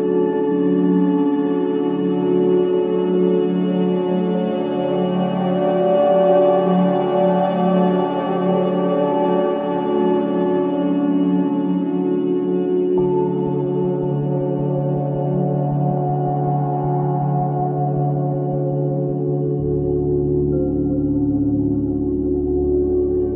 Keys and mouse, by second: 3.6 click, 7.1 g, 11.8 click, 13.8 g.